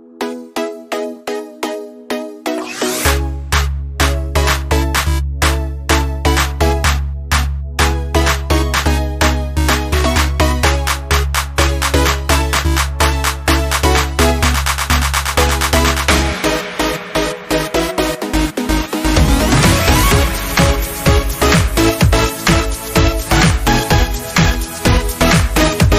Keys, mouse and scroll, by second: 3.3-9.1 drag, 9.1-10.1 scroll down 1, 11.0 click, 13.3 click, 14.7 Right, 15.3 Down, 18.8 click, 19.3 scroll down 1, 20.3 alt+scroll down 1, 21.5 click, 21.7 scroll up 1, 23.9 space, 24.1 click, 24.2 space, 25.9 click.